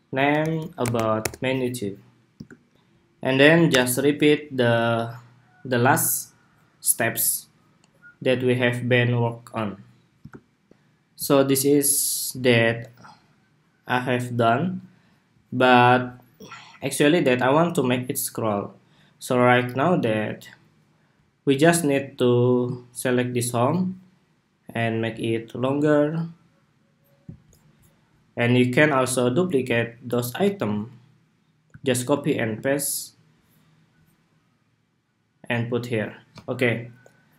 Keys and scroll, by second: 3.4 super+=, 10.3 shift+super+2, 12.1 super+s, 31.4 super+c, 32.1 super+v.